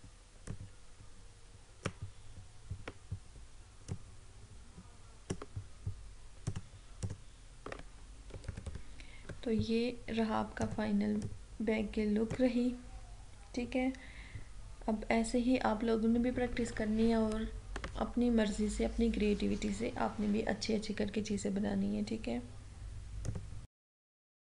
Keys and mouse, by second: 4.0-6.5 drag, 8.5 ctrl+=, 10.6-14.7 drag, 23.3 click.